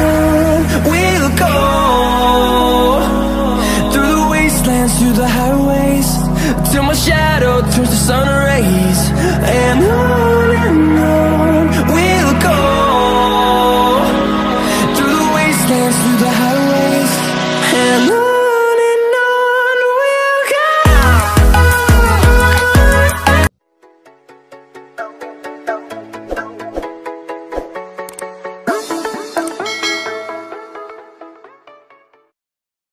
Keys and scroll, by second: 2.3 ctrl+shift+f.